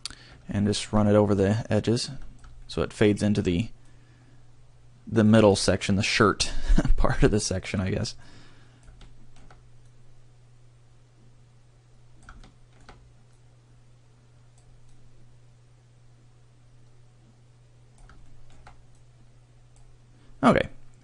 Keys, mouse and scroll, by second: 1.4 click, 3.9 click, 6.2 click, 8.3 click, 9.9 click, 13.4 click, 19.0 click.